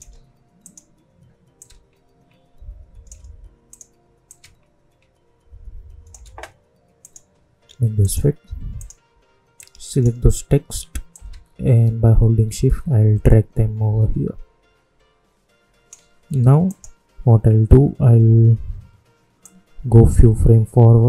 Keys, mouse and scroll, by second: 19.3-21.0 drag.